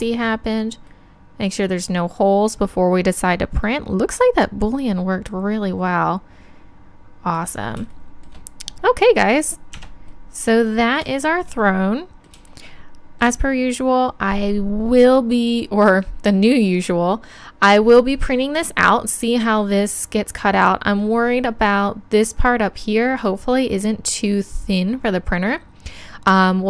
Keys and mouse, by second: 3.9 middle click, 6.2 middle click, 6.3 middle click, 9.8 Tab.